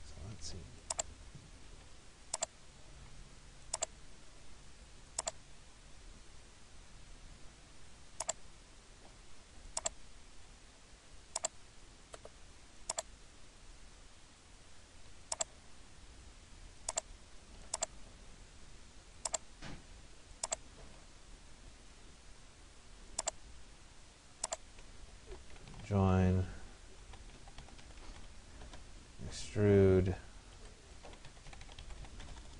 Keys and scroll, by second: 25.5 Return, 28.2 d, 28.7 Return, 30.6 Escape, 32.1 e, 32.3 BackSpace.